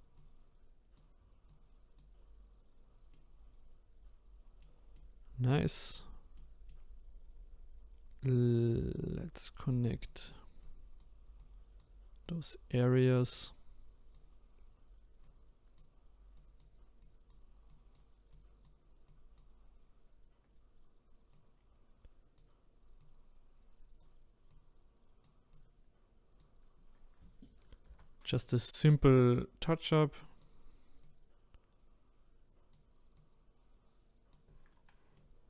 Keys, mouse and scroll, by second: 3.1-5.9 middle drag, 5.9-6.4 scroll down 1, 6.4-8.5 middle drag, 8.5-27.9 drag, 27.9 ctrl+z, 28.8-34.7 drag, 34.7-35.2 scroll down 2, 35.2 middle click.